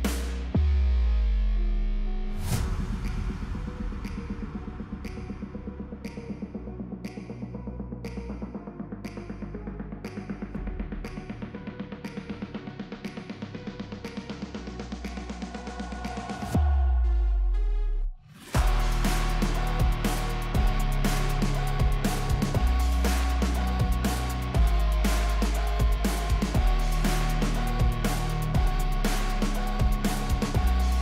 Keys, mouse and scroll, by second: 3.7-4.1 click, 5.0-5.8 drag, 10.1-10.7 drag, 12.7-14.3 drag, 18.8 click, 23.5 drag.